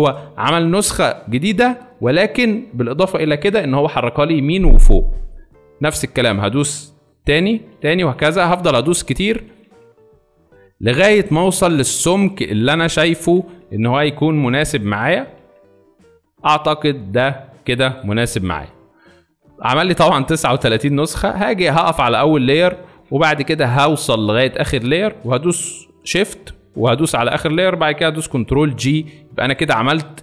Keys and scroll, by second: 7.2 t, 28.4 ctrl+g.